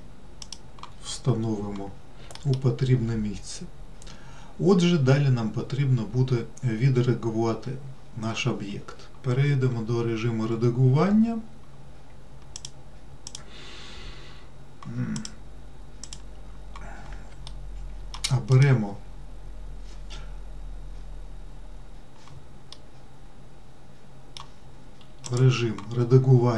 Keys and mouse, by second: 2.7 alt+middle click, 13.0 click, 15.5-16.5 drag, 17.9 alt+middle click, 23.1-24.7 middle drag.